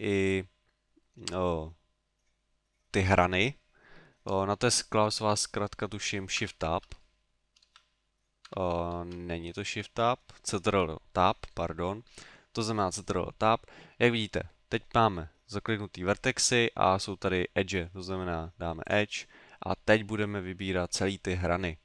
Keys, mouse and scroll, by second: 1.1 middle click, 6.5 shift+Tab, 7.7 shift+Tab, 8.9 shift+Tab, 9.7 ctrl+Tab, 12.1 ctrl+Tab, 19.7 middle click, 20.7 middle click.